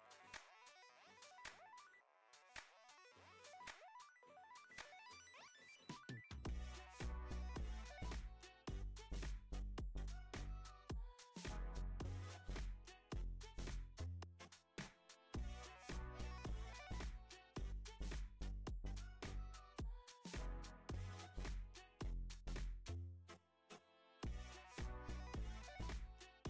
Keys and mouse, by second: 0.2-1.0 middle drag, 1.5 shift+a, 4.2 middle click, 4.6 KP_5, 5.8-7.9 middle drag, 8.9 ctrl+alt+KP_0, 13.2 click, 14.5-16.0 drag, 16.4 g, 19.2 click, 20.4 g, 23.3 g, 25.6 click.